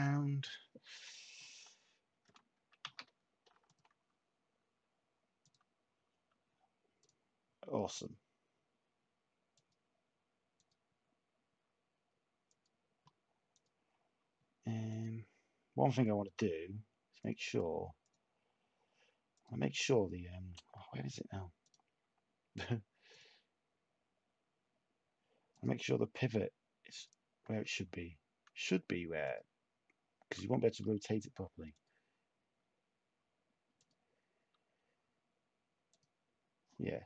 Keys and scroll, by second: 2.8 s.